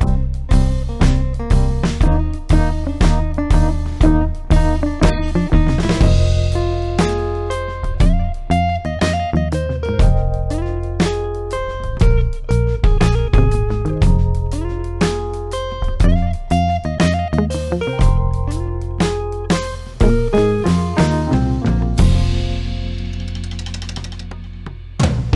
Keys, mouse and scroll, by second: 5.9 space, 7.9 click, 9.6 ctrl+alt+shift+e.